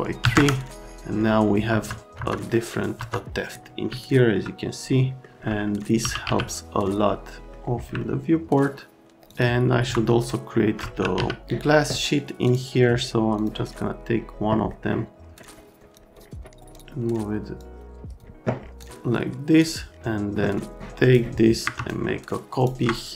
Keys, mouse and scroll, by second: 0.2 KP_3, 0.3 KP_Enter, 1.7 F3, 2.1 F3, 2.9 F3, 3.9 alt+middle click, 4.9 middle click, 5.9-6.7 typing, 8.0 alt+middle click, 9.3 click, 9.7 F3, 10.7-11.6 typing, 12.4 click, 13.4 click, 14.7 middle click, 15.3 click, 15.4 middle click, 15.5 click, 15.8 click, 16.1 click, 16.4 click, 16.7 click, 17.5 click, 18.8 click, 20.8 click, 21.8 shift+click.